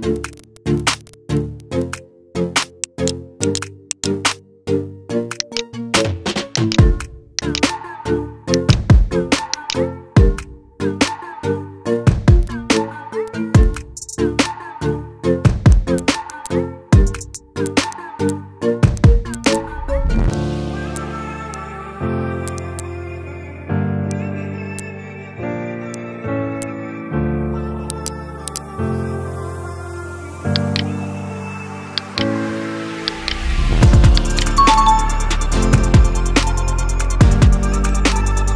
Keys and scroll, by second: 1.0 alt+space, 11.0 ctrl+v, 13.9 ctrl+t.